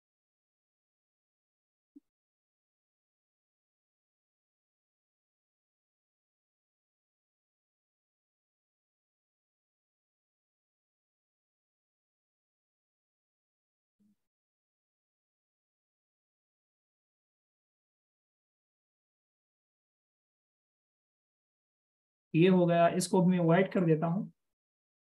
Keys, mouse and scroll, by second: 0.0-2.0 typing, 6.4 shift+super+click, 9.7-10.4 scroll up 1, 12.0 alt+shift+click, 18.1 alt+shift+click.